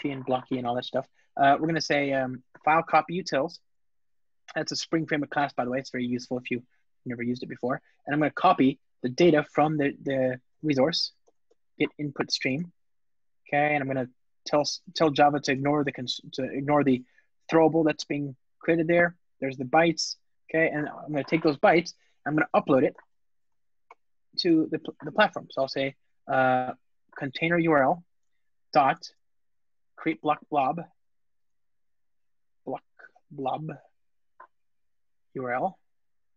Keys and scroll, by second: 3.7 Return, 8.2 Return, 28.0 Return, 31.2 super+z, 31.5 ctrl+space, 36.2 Return.